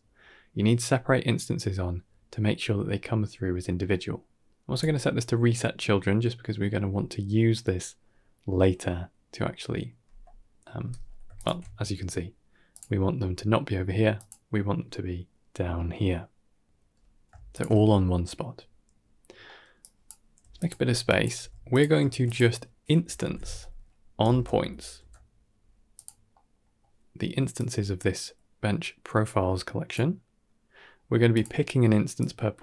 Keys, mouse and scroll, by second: 4.6 click, 11.2 alt+shift+click, 12.6 click, 14.0 click, 16.4 click, 16.5 middle click, 17.4 alt+shift+click, 19.1 scroll down 2, 19.3 middle click, 19.7 click, 20.3 g, 20.9 drag, 21.6 g, 21.9 shift+a, 26.2 middle click, 26.5 middle click, 27.4-29.8 drag, 31.2 click, 32.0-32.6 drag.